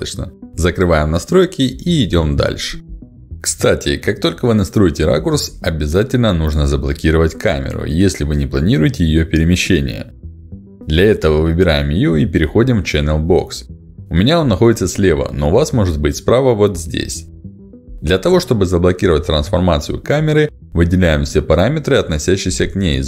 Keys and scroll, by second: 15.8 ctrl+alt+d.